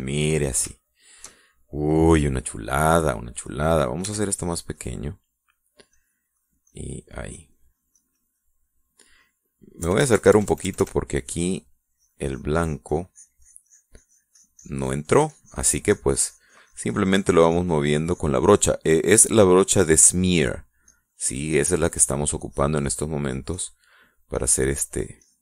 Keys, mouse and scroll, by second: 1.6 shift+middle click, 3.4 middle click, 4.9 f, 5.6 click, 6.0 middle click, 6.8 click, 7.2-9.7 drag, 10.7 KP_Add, 12.2-19.3 drag, 20.1 click, 21.7 click, 22.2 middle click, 23.3 click, 24.8 middle click.